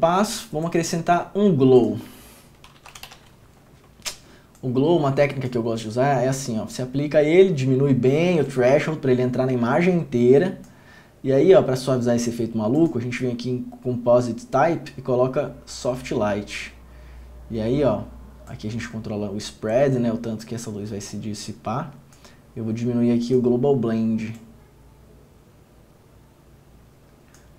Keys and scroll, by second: 3.1 l, 3.2 i, 3.3 w.